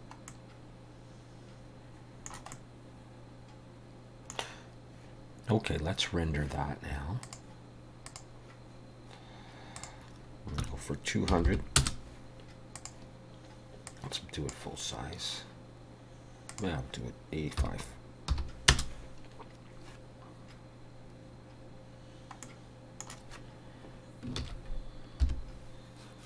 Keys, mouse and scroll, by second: 0.3 middle click, 2.5 middle click, 7.3 click, 8.1 click, 9.8 click, 11.5 0, 12.8 click, 13.9 click, 16.5 click, 22.4 middle click, 24.4 ctrl+s, 25.3 F12.